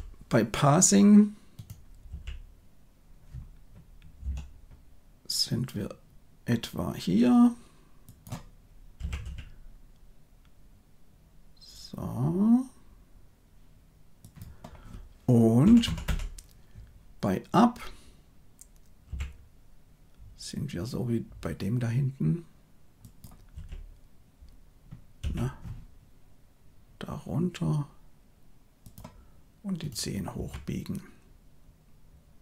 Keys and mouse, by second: 2.0 g, 8.9 g, 15.5 Right, 15.8 Right, 16.0 Right, 19.0 g, 23.4 e, 25.1 r, 29.7 click, 30.3 r.